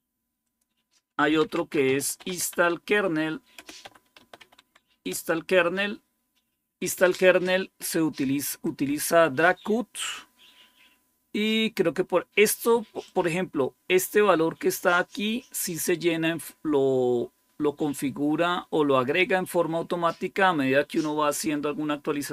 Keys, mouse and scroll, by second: 1.1-5.0 typing, 8.5 click, 12.9-20.0 drag.